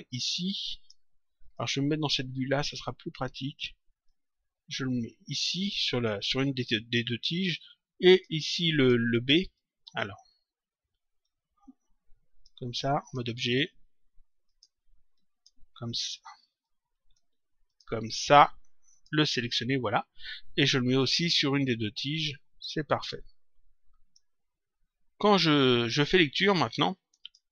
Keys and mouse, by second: 1.4 middle click, 2.5 middle click, 3.9 click, 6.6 click, 8.0 click, 11.2 click, 12.9 click, 14.4 click, 16.6 click, 18.9 click, 20.9 click, 27.2 click.